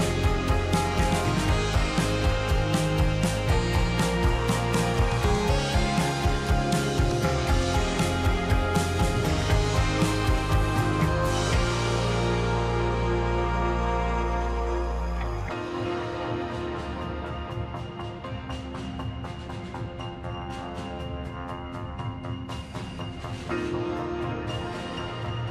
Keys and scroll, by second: 13.1 ctrl+z.